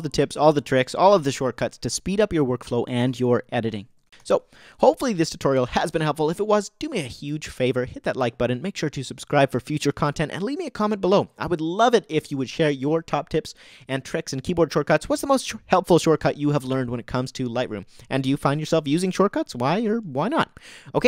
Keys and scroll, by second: 4.0 o.